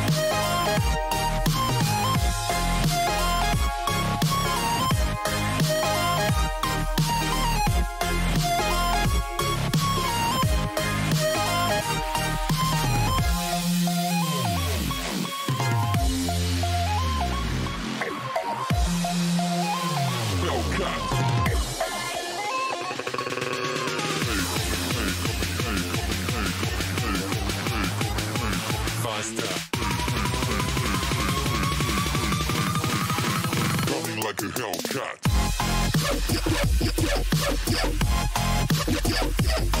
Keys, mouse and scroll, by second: 20.0 KP_3, 20.7-23.1 middle drag, 25.2 ctrl+z, 25.7 ctrl+z, 26.0 ctrl+z, 26.6 ctrl+z, 28.0 a, 29.4 z, 29.9 z, 30.1-33.0 middle drag, 34.5-37.4 middle drag, 37.8-39.8 middle drag.